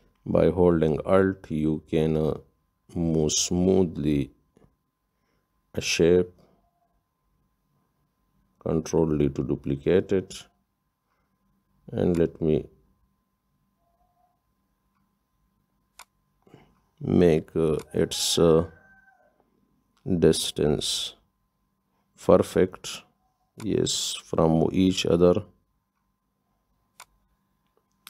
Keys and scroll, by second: 9.8 ctrl+d, 21.6 Up.